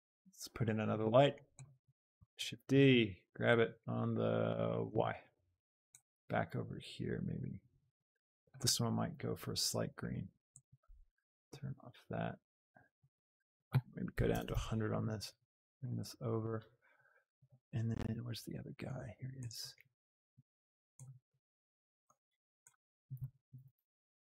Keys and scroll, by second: 2.1 shift+d, 2.5 Escape, 2.8 g, 3.9 g, 4.7 x, 5.0 y, 6.1 g, 11.6 shift+g, 14.2 KP_0, 14.6 Return, 15.3 g, 23.7 z.